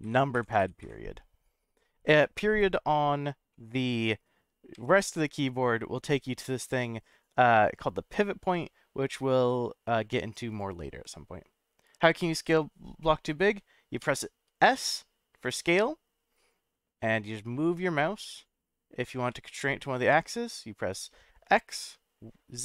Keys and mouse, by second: 3.5-3.8 middle drag, 4.7 ., 13.0-13.6 middle drag, 14.0 s, 19.3 x, 21.7 z.